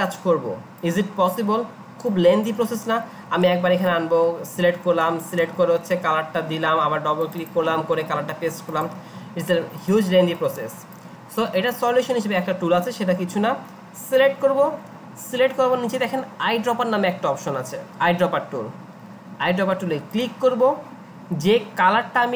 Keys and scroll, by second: 2.7 ctrl+z, 5.7 ctrl+z.